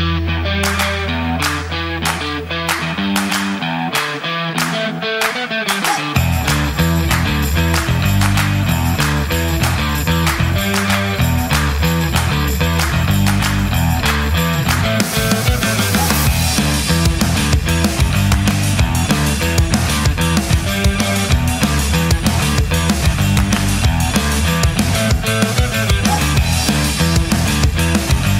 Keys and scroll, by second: 10.7 super+z, 14.2 super+z.